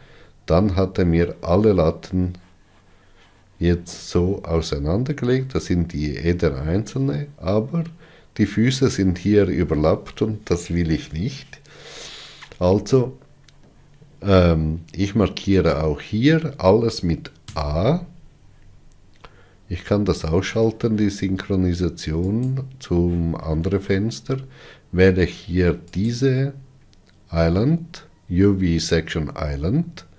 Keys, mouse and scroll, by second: 16.4 click, 18.1 a.